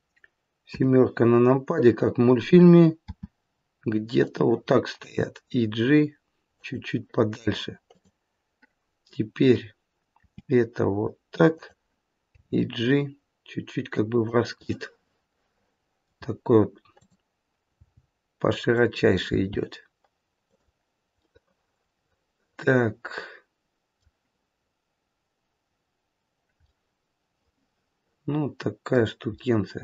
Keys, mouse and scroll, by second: 0.7 KP_7, 3.1 r, 5.1 g, 7.9 click, 10.3 r, 12.4 g, 14.6 middle click, 17.0 click, 18.0 g, 19.3 g, 21.1 middle click, 26.6 middle click, 29.3 middle click.